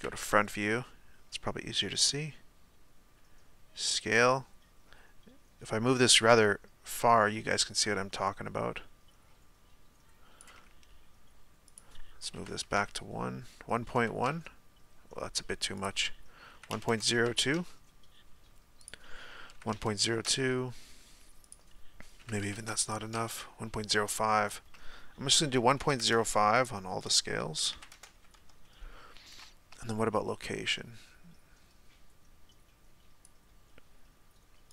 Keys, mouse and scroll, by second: 0.0 KP_1, 2.4-26.6 shift+drag, 28.4-34.7 drag.